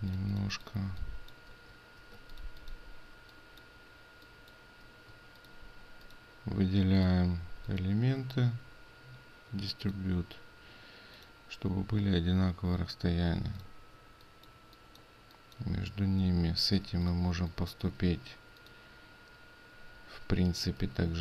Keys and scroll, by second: 0.0 ctrl+space, 2.3 ctrl+alt+space, 20.8 ctrl+g.